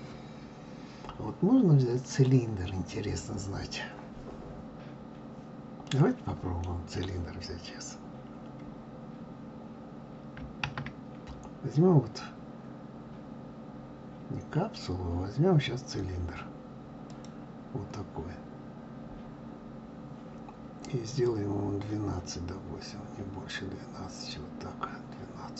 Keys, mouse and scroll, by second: 5.8-8.8 middle drag, 21.2-24.2 drag.